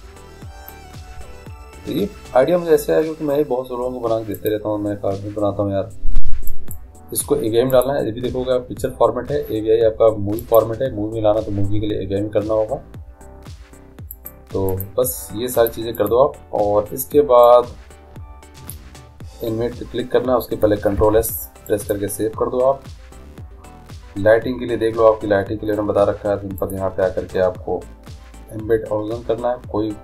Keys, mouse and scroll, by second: 4.4-6.4 drag, 7.7-9.7 drag, 14.2-19.3 drag, 21.0 ctrl+s, 25.7 middle click, 26.6-28.5 drag.